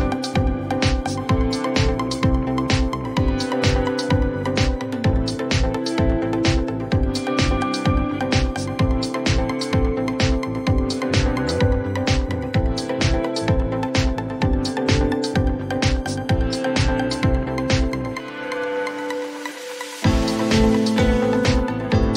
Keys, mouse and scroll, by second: 1.9-5.0 drag, 6.5-8.3 typing, 9.6 click, 9.8 click, 13.0 click, 14.1-16.6 typing, 16.0 click, 17.7-19.8 typing, 17.7 click.